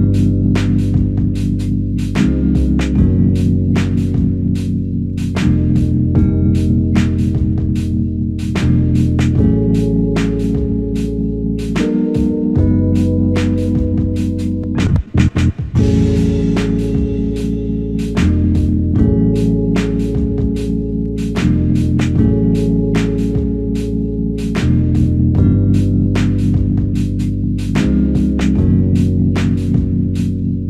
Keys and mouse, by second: 2.0 alt+click, 3.8 alt+click, 11.4 ctrl+click, 12.8 ctrl+click, 16.2 ctrl+click, 27.6 ctrl+click, 30.2 q.